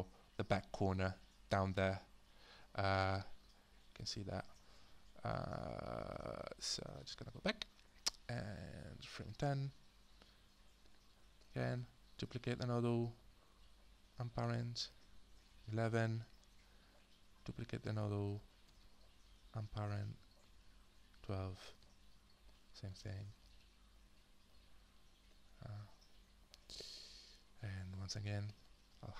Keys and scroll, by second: 7.0 alt+Tab, 12.2 ctrl+d, 18.7 ctrl+d, 23.3 ctrl+d.